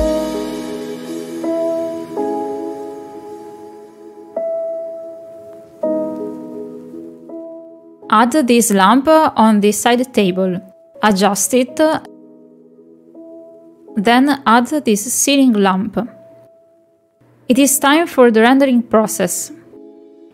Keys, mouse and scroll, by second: 4.7 g, 6.6 shift+d, 7.1 g, 7.8 middle click, 8.3 middle click, 8.9 shift+middle click, 9.4 middle click, 9.9 middle click, 11.7 middle drag, 12.0 shift+middle click, 12.2 middle click, 12.5 s, 20.1 click.